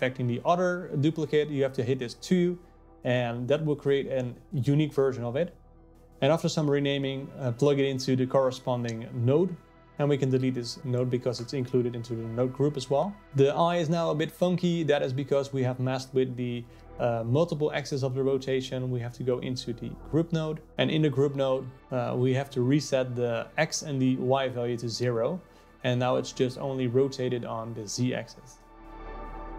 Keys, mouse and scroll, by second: 2.3 click, 4.4 click, 9.2 click, 10.0 x, 11.7 click, 12.9 click, 13.2 x, 13.5 click, 14.7 click, 16.0 click, 17.4 click, 18.5-22.6 drag, 22.6 KP_0, 24.4 click, 27.7-29.2 drag.